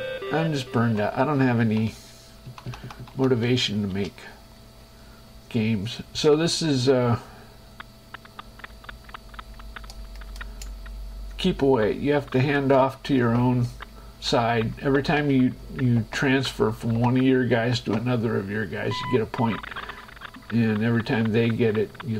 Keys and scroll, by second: 1.0 shift+Escape, 2.7 Right, 3.7 space.